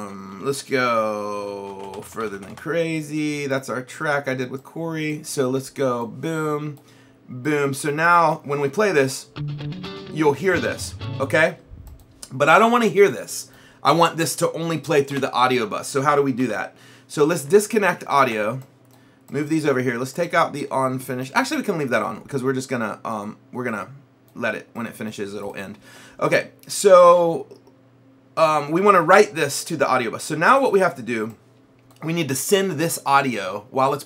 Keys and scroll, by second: 1.5-3.0 typing, 15.2 Delete, 16.4 Delete.